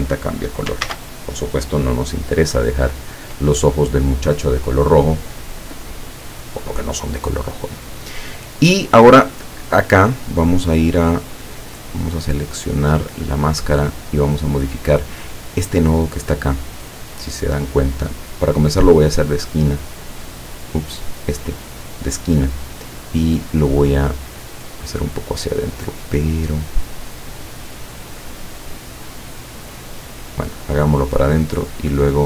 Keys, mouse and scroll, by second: 0.9 ctrl+z, 3.3 click, 12.9 click, 14.2 click, 19.2 click, 20.9 click, 21.9 click, 23.5-26.2 drag, 26.6 click, 28.0 click, 30.0-32.2 drag.